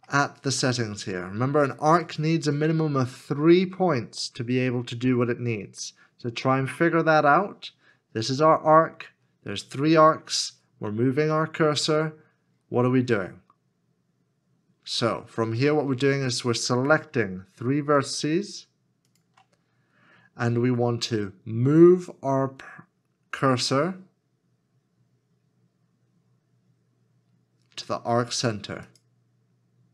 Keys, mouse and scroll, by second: 0.9 shift+middle click, 18.2 shift+click.